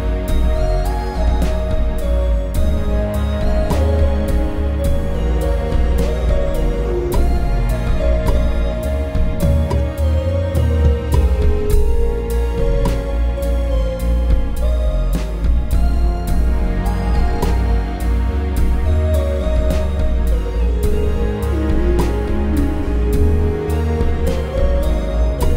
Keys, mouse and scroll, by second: 1.6 m.